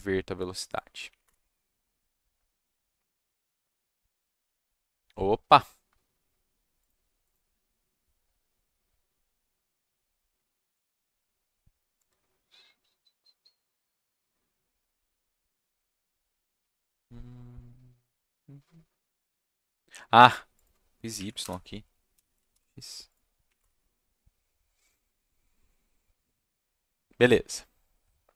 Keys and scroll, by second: 1.0 Up, 1.2 Return, 21.1 Left, 21.4 BackSpace, 22.1 x, 22.5 ctrl+s, 23.4 Up, 23.6 Return.